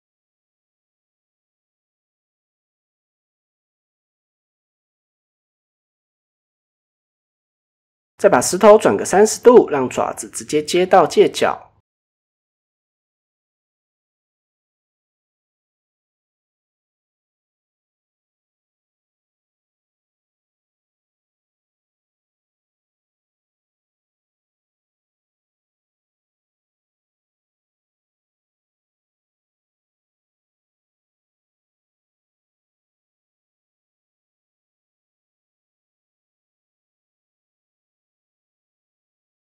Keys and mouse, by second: 0.1 middle click, 1.9 KP_1, 3.5 KP_7, 6.0 r, 7.9 click, 9.4 KP_1, 10.5 middle click, 11.4-12.0 middle drag, 12.1 middle click, 13.1 KP_1, 13.9 shift+middle drag, 15.0 click, 15.3-16.9 drag, 17.2-17.5 shift+middle drag, 17.6-19.0 middle drag, 19.3 KP_1, 20.5-21.2 drag, 21.6 Tab, 22.0 shift+middle drag, 22.8-23.1 middle drag, 23.5 alt+click, 23.8-24.2 middle drag, 25.6 KP_1, 26.7 middle click, 27.5 click, 27.8 shift+middle drag, 28.1-28.7 middle drag, 29.6 middle click, 30.1 KP_1, 31.0 shift+middle click, 32.1 s, 34.9 click, 35.1-36.6 drag, 37.1-38.3 drag, 39.4 Tab.